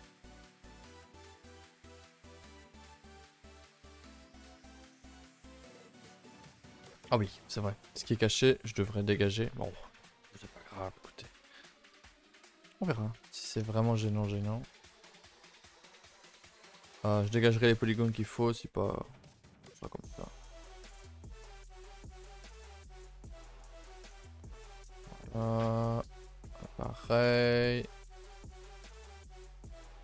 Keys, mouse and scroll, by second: 0.7 click, 1.4 z, 2.3 s, 4.7 z, 4.9 shift+middle click, 5.3 a, 5.4 a, 6.0-6.5 middle drag, 6.5-7.0 scroll up 4, 7.0-9.5 shift+middle drag, 9.5 scroll up 1, 9.8-12.3 middle drag, 12.3-12.7 scroll up 4, 12.7-13.2 middle drag, 13.2 Tab, 13.6-14.0 shift+middle drag, 14.0 Tab, 14.2 click, 14.4 Tab, 15.0 click, 15.3 g, 17.1-19.8 middle drag, 19.8 g, 20.9 click, 21.3 g, 23.9-25.4 middle drag, 25.4 scroll up 3, 25.7 middle click, 26.3-27.2 typing, 26.8 middle click, 28.3 middle click, 29.0 middle click, 29.3 g.